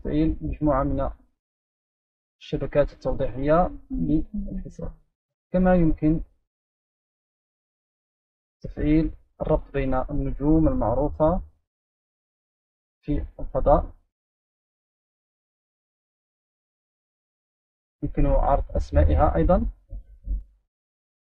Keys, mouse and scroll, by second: 0.8 click, 2.0 click, 2.8 click, 3.4 click, 5.4 click, 7.1 click, 7.7 click, 9.1-9.6 ctrl+scroll down 2, 10.1-11.3 right drag, 11.4-12.3 scroll down 1, 12.3-16.9 right drag, 18.6 click, 19.4 click, 19.5-20.3 drag, 20.5 click.